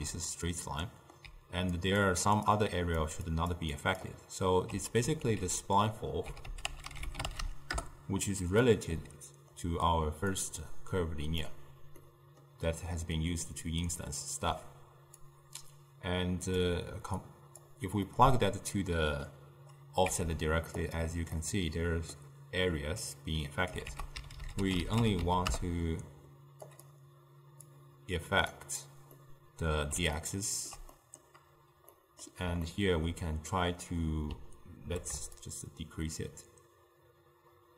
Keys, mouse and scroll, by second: 1.0-1.4 middle drag, 1.4-4.8 typing, 1.8 click, 2.3 click, 2.8 click, 3.4 click, 3.8 click, 5.3 ctrl+a, 9.1-10.5 middle drag, 10.5 drag, 12.1-15.3 middle drag, 15.3 click, 17.3 click, 18.1-20.1 middle drag, 20.1 z, 21.5-23.9 middle drag, 23.9 ctrl+a, 27.8-29.2 drag, 29.2-35.5 middle drag, 35.5-37.7 shift+drag.